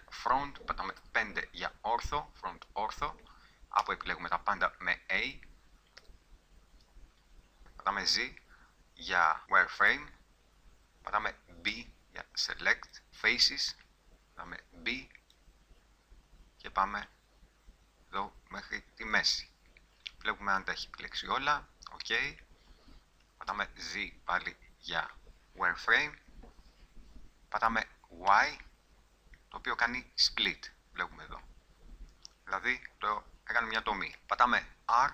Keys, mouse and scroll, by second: 1.0 KP_5, 3.8 a, 6.0 n, 7.6 z, 11.7 b, 13.1 shift+c, 14.5 b, 20.2 middle click, 21.0 click, 21.2 middle click, 23.4 z, 28.2 y, 32.5 g, 34.1 click, 34.9 r.